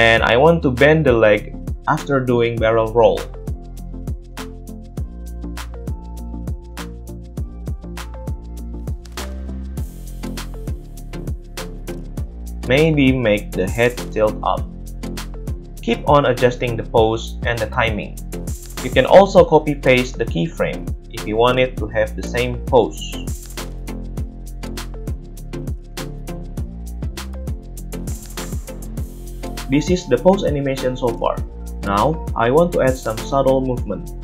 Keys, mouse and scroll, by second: 0.7 middle click, 1.1 click, 1.1 middle click, 1.3 click, 2.4-4.9 drag, 3.7 g, 4.9-6.3 middle drag, 6.3 click, 6.6-13.9 middle drag, 7.0 g, 11.9 a, 13.9 click, 14.7 click, 14.9-17.8 drag, 14.9 middle click, 14.9 right click, 17.8-18.3 middle drag, 18.3-24.1 shift+drag, 19.8 right click, 21.5 middle click, 21.5 right click, 22.6 ctrl+c, 23.6 ctrl+v, 24.1 middle drag, 24.3 drag, 24.4 middle click, 24.5-26.6 drag, 26.6 shift+middle drag, 26.6 shift+click, 26.8 shift+middle click, 26.8-30.3 drag, 29.5 space, 30.3 middle click, 30.9-34.2 drag.